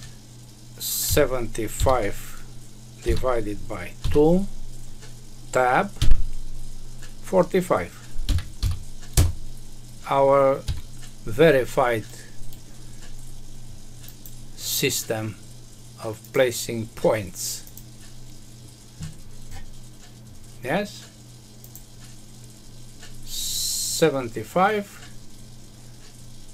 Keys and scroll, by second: 5.9 Tab, 9.1 Return, 10.6 Escape.